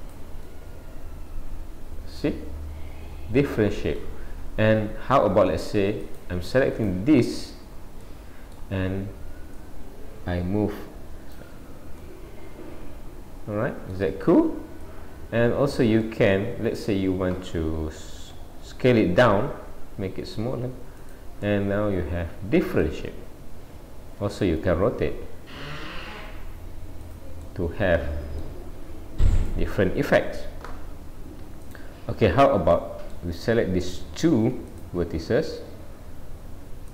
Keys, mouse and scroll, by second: 0.5 middle click, 6.1 click, 6.8 click, 7.6-8.0 scroll down 2, 8.0 middle click, 8.6 scroll down 1, 9.6 click, 12.0 middle click, 14.9 click, 16.1 middle click, 21.4 middle click, 24.8 r, 27.5 middle click, 29.4 click, 29.9 scroll up 1, 30.5 scroll up 2, 31.7 click, 32.1-32.8 scroll up 2, 32.8 middle click, 33.9 click, 34.7 shift+click.